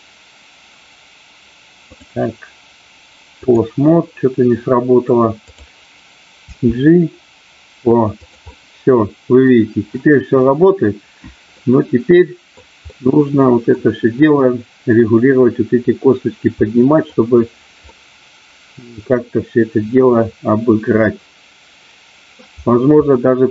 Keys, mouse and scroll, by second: 1.8-3.5 drag, 6.5 g, 8.5-9.5 middle drag, 11.7-12.7 middle drag, 12.9 middle click, 16.7 middle click, 17.9-22.3 middle drag, 23.2 middle click.